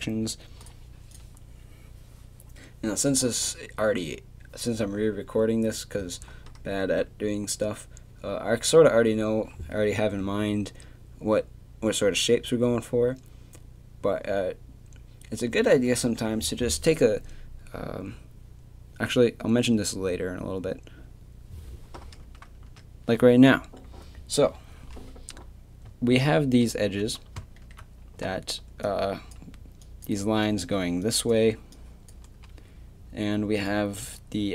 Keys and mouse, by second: 1.1 click, 22.2 Tab, 22.6 Tab, 25.9-26.6 d, 28.2-28.9 d, 28.9-30.0 drag.